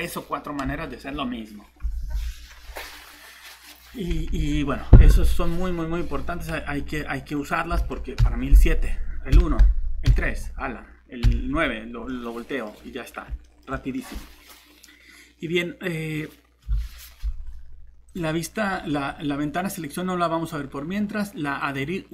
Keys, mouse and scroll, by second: 4.3 alt+shift+Tab, 7.8 alt+Tab, 8.2 7, 9.3 1, 10.1 3, 11.2 9, 18.1 click.